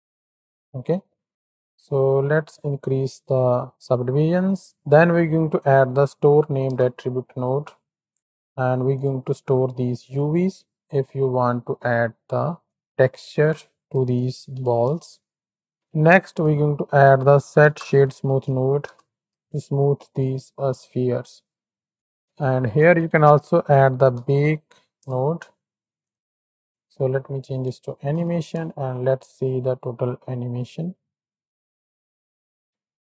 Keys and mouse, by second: 0.6 space, 1.2 click, 1.3 g, 4.0 shift+a, 4.7 BackSpace, 8.1-9.0 drag, 10.3-11.9 drag, 12.7-13.0 drag, 13.4-14.9 drag, 15.7 ctrl+x, 15.7 shift+a, 21.9 click, 22.5 shift+a, 26.6 click, 28.0 shift+Right, 28.1 shift+Left, 28.5 space, 29.6 click.